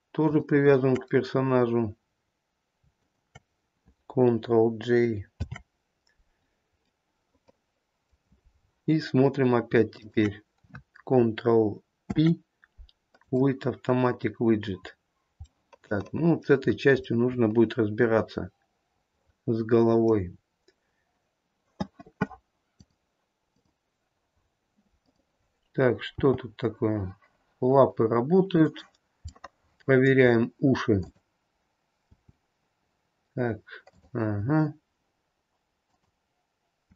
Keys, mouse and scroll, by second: 0.4 shift+click, 3.1 shift+click, 5.6 ctrl+j, 7.0 middle click, 8.8-9.8 scroll down 3, 10.1 shift+click, 12.2 ctrl+p, 15.0-15.8 scroll up 2, 15.8 middle click, 16.0 middle click, 16.8-17.3 scroll up 1, 17.3 middle click, 19.4 middle click, 19.8 middle click, 20.4-22.8 scroll down 4, 23.6 click, 25.2 click, 26.3 g, 29.5 middle click, 30.1 middle click, 30.4-31.1 scroll up 1, 31.1 click, 31.1-31.8 scroll up 1, 32.2 g, 36.0 click.